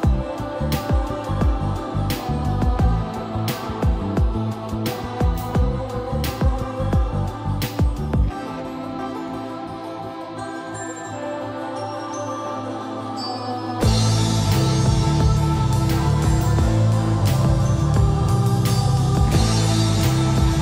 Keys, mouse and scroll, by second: 1.5 scroll up 1, 4.2 scroll down 1, 6.2-7.6 drag, 7.9 scroll up 1, 8.4 scroll down 1, 16.8 click, 20.3 middle click.